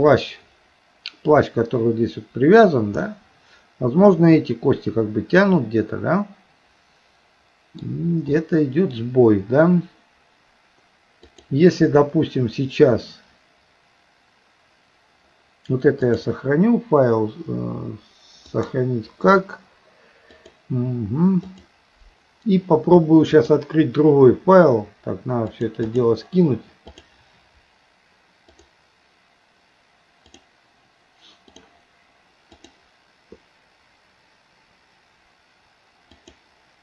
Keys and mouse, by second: 3.1-7.8 middle drag, 11.2 click, 16.1-18.8 drag, 23.3-25.6 drag, 25.9-27.2 drag, 32.6-36.8 drag.